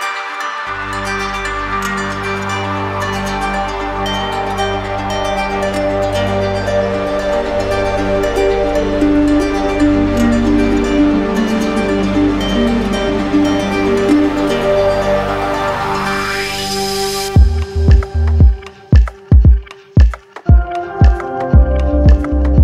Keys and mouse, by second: 0.5 click, 2.4 w, 5.9 click, 10.7 z, 12.5 q, 14.6 click, 16.0 click, 16.3 ctrl+d, 17.7 click, 18.4 click, 19.8 click, 19.9 ctrl+z, 21.2 right click, 22.3 right click.